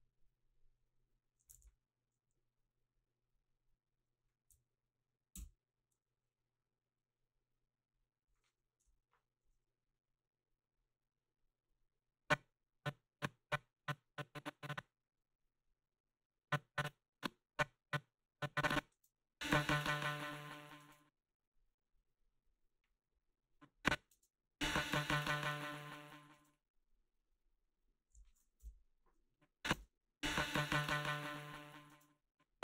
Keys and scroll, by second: 1.6 ctrl+z, 8.8 Delete, 18.9 space, 20.8 space, 24.1 space, 26.4 space, 28.6 Delete, 29.7 space, 31.9 space.